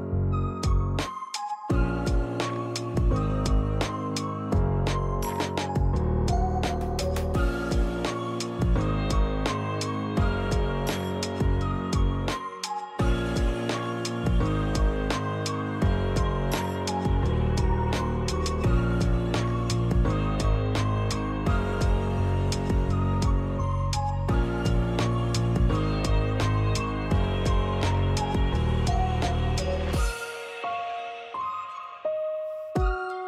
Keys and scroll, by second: 0.1 Escape, 2.2 Escape, 4.2 Escape, 5.0-6.2 typing, 7.6-8.4 typing, 15.5 f, 16.7 1, 17.1 Return, 21.9-23.6 typing, 27.0 p, 29.7 l, 31.5 Escape, 32.8 Escape.